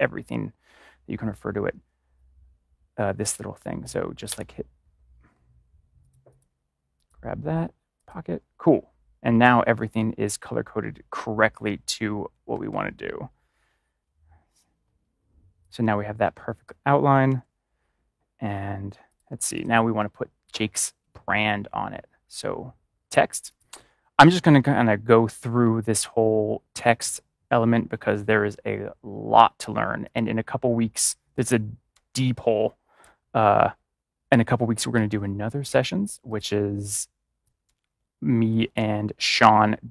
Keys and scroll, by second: 12.2 ctrl+y, 12.5 ctrl+=, 17.1 ctrl+-.